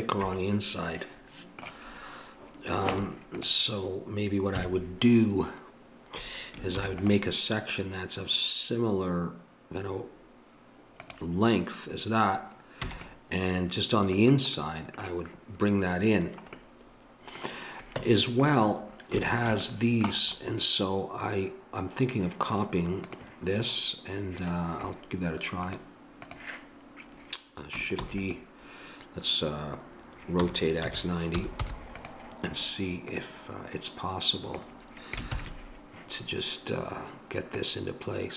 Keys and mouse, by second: 2.9 Tab, 4.6 KP_3, 6.7 ctrl+r, 12.9 a, 18.0 Tab, 23.0-28.0 drag, 28.0 shift+d, 30.4 r, 33.1-34.9 drag, 35.3 ctrl+KP_7, 37.6-38.3 drag.